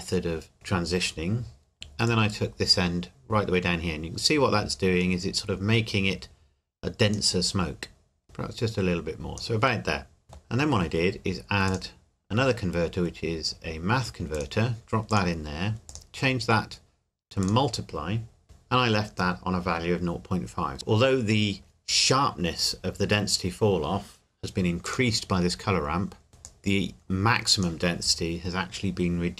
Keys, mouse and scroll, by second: 2.1 click, 7.7-8.2 scroll up 1, 8.2 click, 10.2 middle click, 10.6-11.7 scroll up 1, 11.7 click, 14.3 click, 24.9 click, 26.5 click.